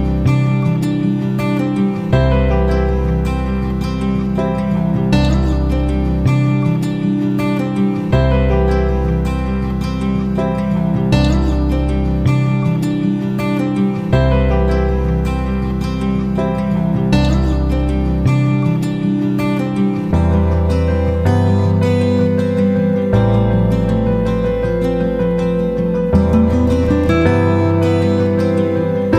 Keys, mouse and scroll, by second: 15.0 F9, 16.0-26.0 drag, 26.7-29.1 ctrl+shift+drag.